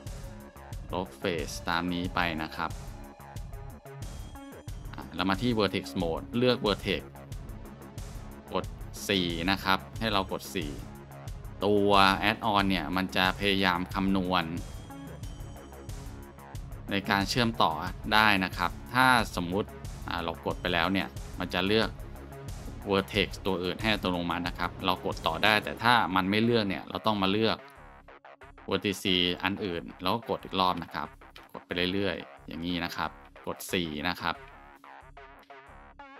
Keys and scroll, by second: 5.1 shift+Tab, 7.2 Tab, 8.8 4, 15.5 4, 19.9 ctrl+z, 21.3 4, 25.5 4, 29.9 4.